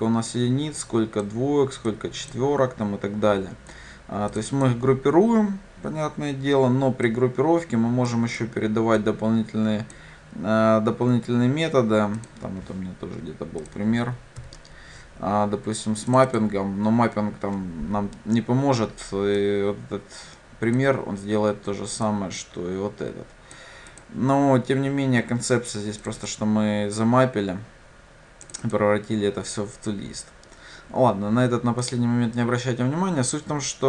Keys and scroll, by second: 14.5 ctrl+/.